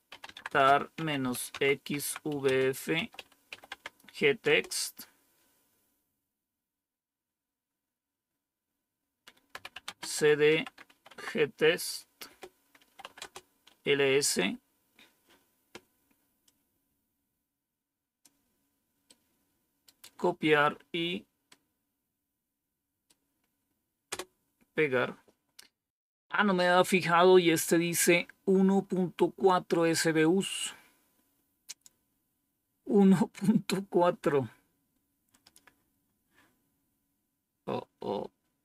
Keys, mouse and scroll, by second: 0.0-4.3 typing, 9.2-13.1 typing, 12.1 Return, 16.3-18.2 drag, 19.0-20.0 right drag, 21.4-23.0 right drag, 24.0 Return.